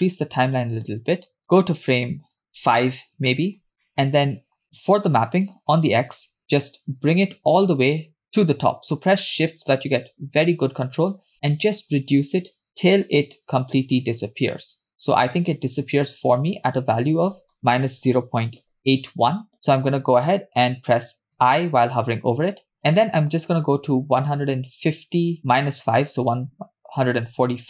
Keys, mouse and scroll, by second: 1.4 click, 2.5 Left, 3.8 middle click, 4.9 click, 5.5 scroll up 1, 6.3-16.3 drag, 16.7-17.4 scroll up 5, 17.4-18.8 drag, 18.8 BackSpace, 22.2 i, 22.7-23.6 scroll down 1, 23.6 scroll down 2, 23.6-24.1 scroll up 2, 25.4 click, 26.5 click.